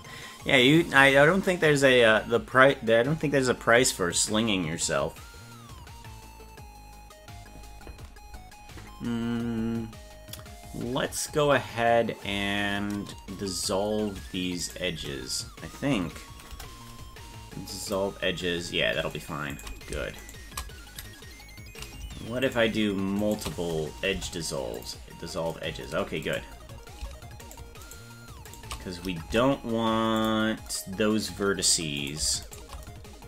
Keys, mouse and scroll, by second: 8.7-9.1 scroll up 3, 14.7 shift+right click, 16.6 Delete, 19.6 right click, 20.2 shift+right click, 22.5 shift+right click, 23.3 shift+right click, 24.2 Delete, 26.3 right click, 26.6 scroll down 3, 27.5 shift+right click, 28.1 right click, 28.7 right click, 29.3 Delete, 32.0 right click, 32.5 shift+right click.